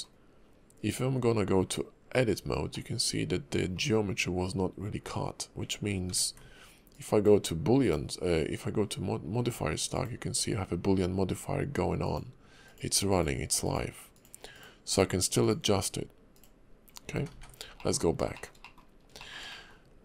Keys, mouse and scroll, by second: 1.2 Tab, 2.7 middle click, 5.0 Tab, 6.1 ctrl+`, 17.1 ctrl+z, 17.3 ctrl+z, 17.8 middle click, 18.0 scroll down 2, 18.3 shift+middle click, 18.6 middle click, 18.9 scroll up 2, 19.2 middle click, 19.5 middle click.